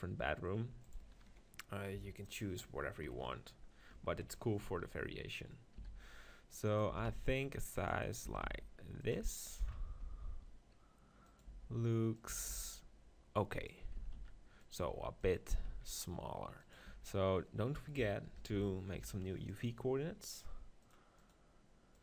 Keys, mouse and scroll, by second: 3.1 KP_1, 4.2 ctrl+KP_1, 5.8 s, 6.8-8.4 drag, 6.9 s, 8.3 s, 10.0 g, 11.4-13.2 drag, 11.6 s, 12.3 s, 13.6 click, 14.1 s, 14.9 g, 15.5 s, 16.9 Tab, 18.5 ctrl+l, 18.9 u, 20.8-22.0 drag.